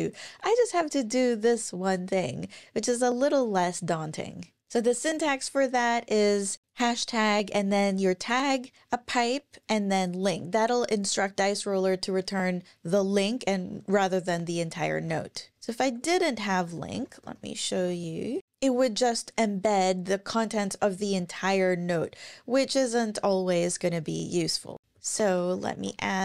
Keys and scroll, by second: 15.0 super+`, 15.8 super+Right, 16.9 alt+BackSpace, 17.2 alt+BackSpace, 17.7 Up, 24.8 Down, 24.8 alt+Right, 24.9 super+Left, 25.4-26.2 typing.